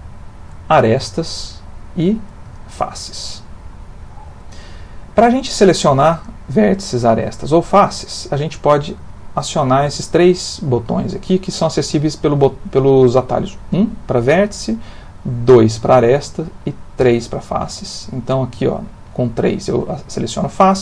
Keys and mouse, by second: 1.2 shift+click, 2.6 shift+click, 5.8 click, 6.2 click, 6.7 click, 7.0 click, 7.5 click, 8.1 click, 13.7 1, 15.5 2, 18.2 click, 18.7 click, 19.1 click, 19.5 click, 19.8 click, 20.1 click, 20.4 click.